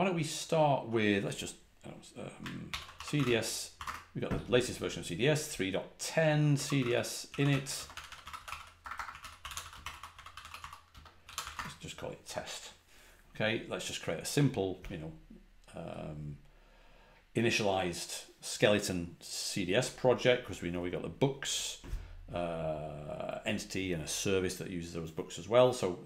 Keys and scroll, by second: 2.6 ctrl+l, 3.7 typing, 6.5 c, 8.1-9.6 typing, 12.9 typing.